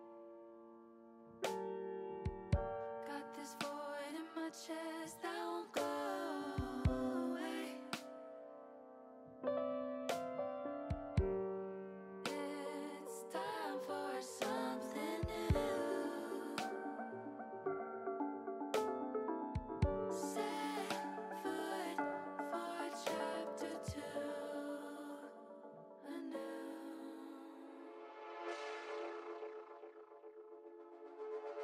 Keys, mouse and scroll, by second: 1.1 s, 2.1 click, 2.5-3.6 middle drag, 4.5 s, 5.2 click, 6.0 middle click, 6.6 middle click, 7.5 middle click, 10.9 click, 10.9 i, 11.3 ctrl+z, 14.2 alt+i, 17.1 ctrl+shift+i, 22.3 click, 23.6 click, 24.4 click, 25.4-29.6 drag, 29.9 ctrl+z, 30.9 click.